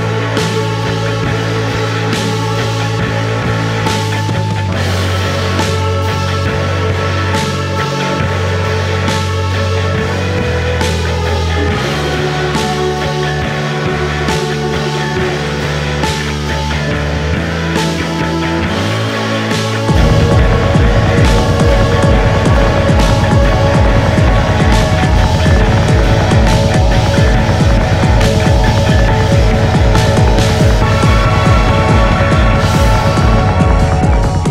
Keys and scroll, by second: 4.8 3, 5.2 4, 7.7 3, 17.2 ], 24.3 ], 26.0 ].